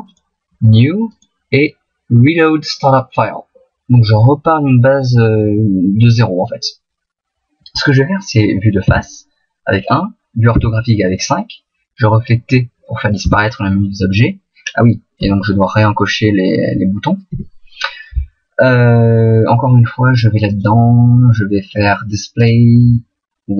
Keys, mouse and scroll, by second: 0.1 click, 17.3 n.